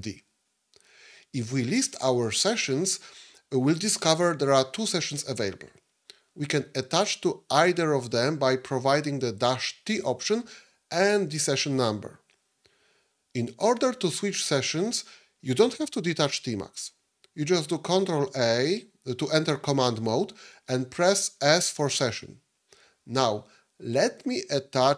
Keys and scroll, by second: 0.0 d, 18.1 ctrl+a, 21.3 s.